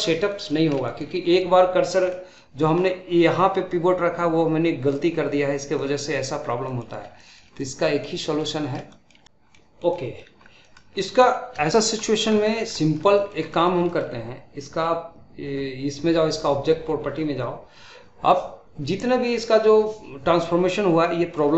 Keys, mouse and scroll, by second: 0.2 middle click, 0.6 scroll up 1, 0.7-5.0 shift+middle drag, 5.7 middle click, 6.2-6.5 scroll down 2, 6.5-6.8 middle drag, 6.8 scroll up 1, 7.1-9.2 shift+middle drag, 9.5-10.4 middle drag, 10.4 scroll down 1, 10.6 middle click, 10.9-11.6 scroll up 1, 11.6-16.3 shift+middle drag, 16.3-19.3 drag, 21.0-21.5 middle drag.